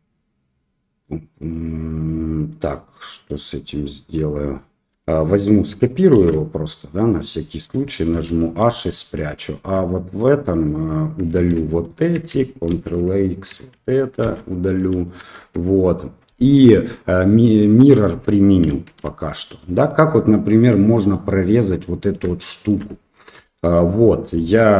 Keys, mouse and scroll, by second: 4.4 Tab, 5.1 shift+click, 6.1 shift+d, 8.1 h, 9.1 click, 9.5 Tab, 10.5 click, 11.7 alt+click, 12.7 ctrl+x, 13.2 alt+click, 14.2 ctrl+x, 15.0 shift+middle click, 15.4 Tab, 18.8 ctrl+a, 22.3 shift+middle click.